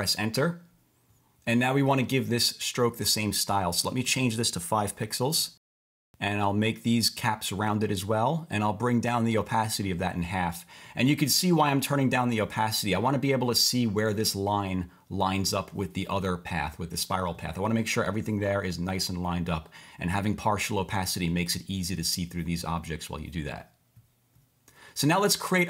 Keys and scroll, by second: 0.1 Return, 5.0 5, 5.3 Return.